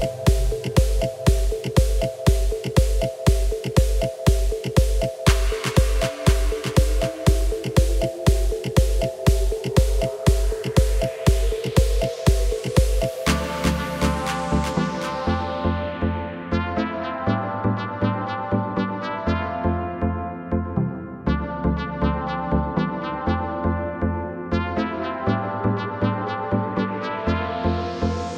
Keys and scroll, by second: 2.9 s, 4.4 y, 14.2 s, 16.1 y, 18.5 s, 26.5 g, 26.7 y, 28.0 s.